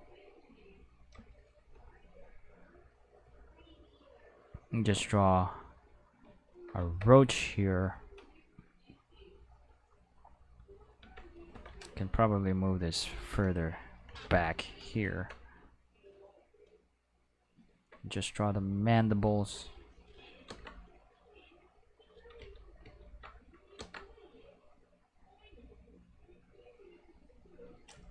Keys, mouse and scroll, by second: 0.3 click, 2.3 click, 3.9 click, 5.3 click, 6.9-8.8 middle drag, 11.0 Tab, 11.3 right click, 11.9 g, 13.3 click, 14.2 ctrl+Tab, 14.7 click, 15.1 shift+middle click, 15.9-17.3 drag, 18.4 click, 19.5 click, 20.5 ctrl+z, 21.6 click, 21.9 click, 22.4 ctrl+z, 22.8 ctrl+z, 23.8 ctrl+z, 24.6 click, 26.3-27.3 drag.